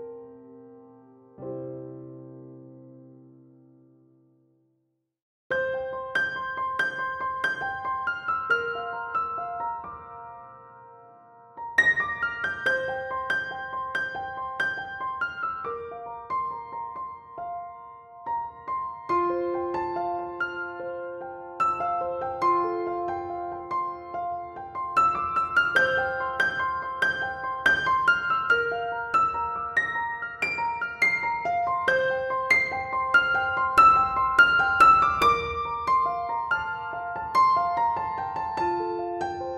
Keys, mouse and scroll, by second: 0.6 click, 1.8 b, 2.3 click, 3.2 b, 4.3 click, 4.4 scroll down 1, 4.5-6.3 middle drag, 5.0 Tab, 5.6 alt+z, 6.3-7.8 drag, 8.0-10.7 middle drag, 8.4 scroll up 1, 8.7 Tab, 9.2 KP_1, 9.6 KP_3, 10.3 alt+z, 10.5 scroll up 1, 10.7 click, 11.1 b, 12.4 click, 12.6 ctrl+z, 13.0 s, 13.9 click, 14.3 shift+click, 15.1 s, 16.0 click, 16.1 scroll down 1, 16.2 Tab, 16.5-16.8 scroll up 1, 16.8 s, 17.6 click, 18.2 alt+z, 19.3 middle click, 19.3 r, 20.5-22.6 drag, 22.8-26.1 drag, 26.9-27.9 drag, 27.9-29.8 shift+middle drag, 28.8 KP_7, 29.3 s, 29.8 click, 30.4 click, 31.2 shift+d, 31.6 r, 32.4-35.0 drag, 33.8 r, 35.3 shift+d, 35.6 r, 36.5-37.0 drag, 36.9 scroll down 2, 37.0-38.9 middle drag, 37.5 scroll up 2, 37.8 scroll down 2, 38.0 KP_7, 38.2-38.9 scroll up 4, 38.9-39.5 drag.